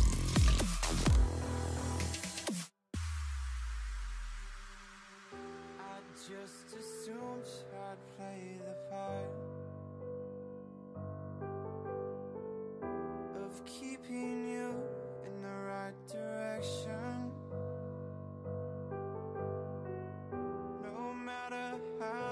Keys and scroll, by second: 12.3-14.7 typing.